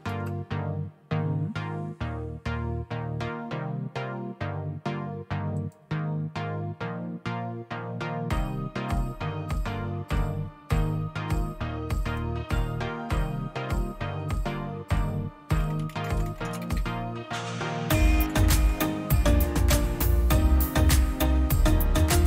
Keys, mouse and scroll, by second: 0.0 Return, 5.6-6.7 drag, 12.0-13.6 drag, 15.2-16.8 typing, 17.9-20.1 typing, 22.2 typing.